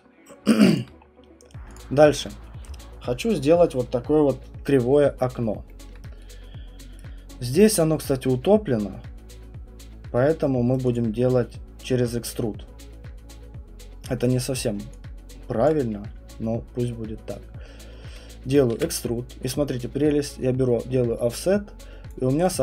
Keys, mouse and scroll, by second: 0.7 alt+click, 1.0 scroll, 1.7 click, 2.2 middle click, 4.8 middle click, 5.9 middle click, 7.0 right click, 7.7 middle click, 7.7 middle click, 8.2 middle click, 10.7 right click, 10.9 click, 15.6 alt+click, 18.7 ctrl+e, 22.1 click.